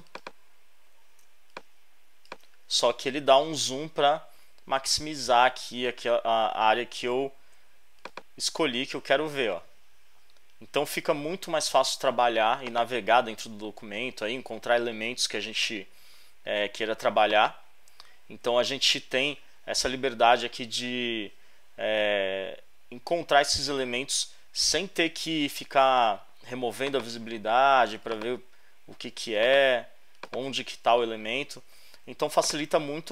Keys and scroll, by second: 1.3 alt+space, 13.4 alt+Left.